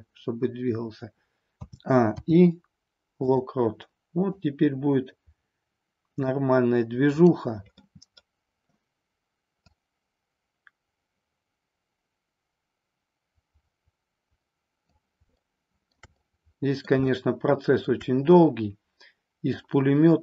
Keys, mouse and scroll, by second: 1.5 a, 2.1 i, 4.3-6.3 drag, 7.0 click, 7.7-8.2 middle drag, 9.7-15.0 drag, 15.3-15.9 shift+middle drag, 16.2 middle click, 17.2-17.9 shift+middle drag, 19.6-20.2 drag.